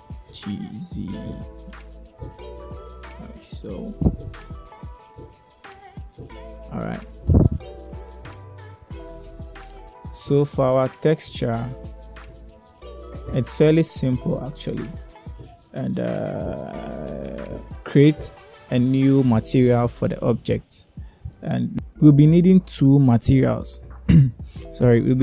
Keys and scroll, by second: 0.9 g, 1.5 z.